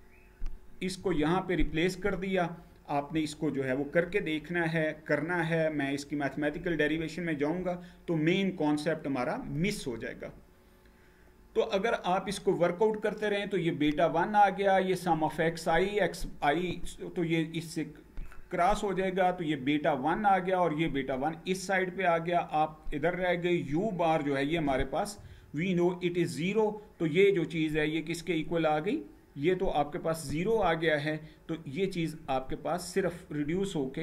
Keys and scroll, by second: 9.9 Page_Down.